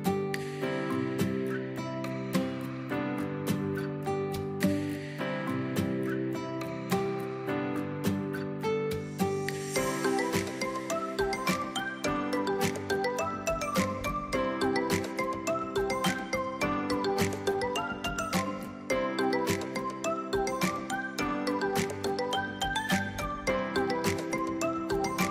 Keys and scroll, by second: 12.6 space, 17.4 space, 20.8 x.